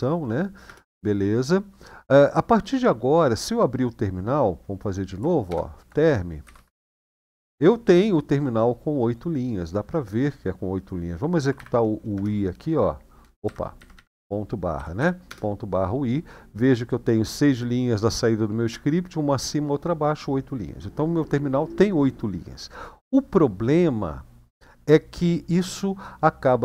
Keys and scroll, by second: 0.4 Return, 3.1 typing, 5.3-6.6 typing, 6.9 Return, 11.0-11.9 typing, 11.9 Return, 13.2 Up, 13.6 Left, 13.7 Left, 14.5 ., 14.7 /, 15.0 Return.